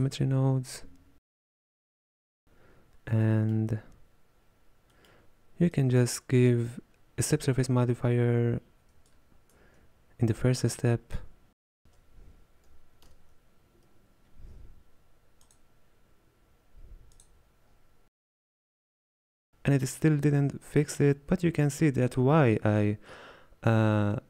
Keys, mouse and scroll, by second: 1.3-5.8 drag, 18.0-19.0 middle drag, 19.5-24.2 scroll down 1.